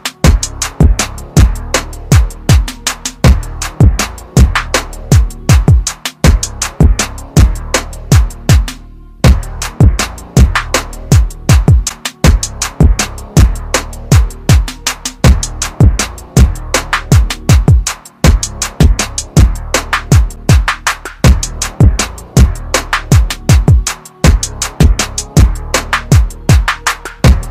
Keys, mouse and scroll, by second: 0.0 click, 0.2 r, 10.3 click, 16.3 ctrl+z, 17.8 click, 18.8 click, 19.5 click, 22.2 click.